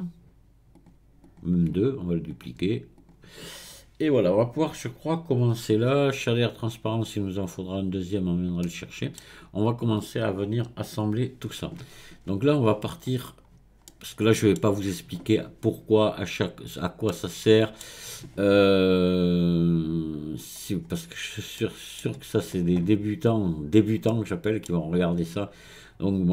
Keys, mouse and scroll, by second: 1.7-4.7 right drag, 8.1-8.6 scroll down 1, 8.6-10.0 middle drag, 10.0 click, 12.2-13.9 scroll up 1, 13.9 middle click, 14.6-17.1 scroll down 1, 17.1-20.2 middle drag, 20.8-21.6 scroll up 1, 21.6-24.8 middle drag, 24.8-26.3 scroll down 1.